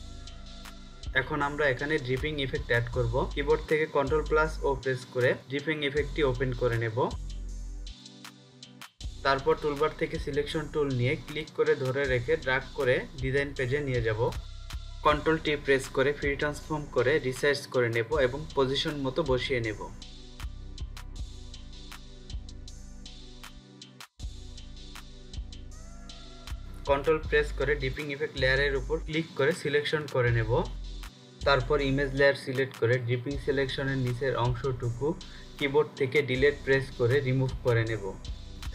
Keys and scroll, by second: 4.7 ctrl+o, 14.8 ctrl+t, 35.5 Delete.